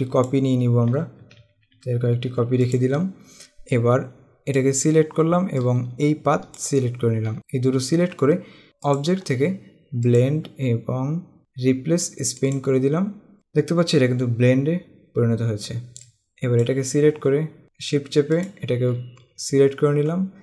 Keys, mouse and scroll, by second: 2.7 click, 5.7 click, 9.0 click, 10.2 click, 12.5 click, 16.2 click.